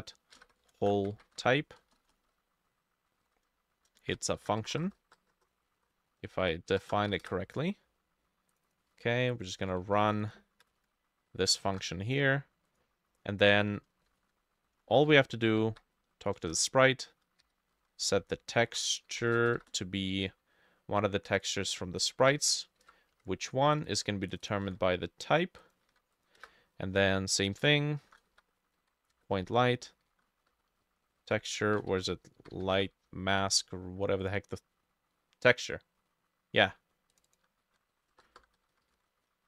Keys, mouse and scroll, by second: 0.0-2.2 typing, 3.3 ctrl+z, 4.4 ctrl+shift+z, 4.4 Right, 4.7-7.0 typing, 6.2-8.7 drag, 7.3 Return, 8.9 ctrl+c, 9.6 ctrl+v, 9.9 ctrl+z, 10.7 Return, 10.8 ctrl+v, 11.4-12.2 typing, 13.9 shift+middle click, 14.1-16.2 typing, 14.8 shift+middle click, 16.4 Return, 17.5-20.0 typing, 17.8-24.5 drag, 21.7 ctrl+c, 21.7 middle click, 22.0-23.1 typing, 22.2 middle click, 22.5 ctrl+v, 23.1 Left, 24.7 ctrl+c, 24.7 typing, 25.9 ctrl+v, 26.4 Return, 27.8-33.3 typing, 31.6 ctrl+middle click, 33.4 Escape, 37.3-39.4 drag, 37.4-39.4 typing.